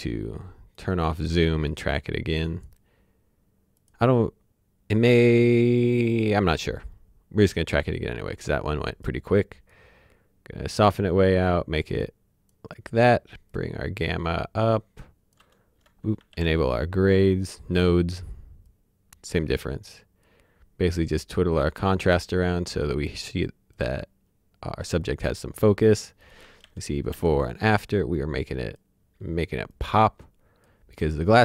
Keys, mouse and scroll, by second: 0.7 click, 7.7 click, 16.3 alt+d, 18.6 click, 24.7-26.2 scroll up 1, 26.2 click, 26.6 ctrl+d, 27.1 ctrl+d, 28.1 click.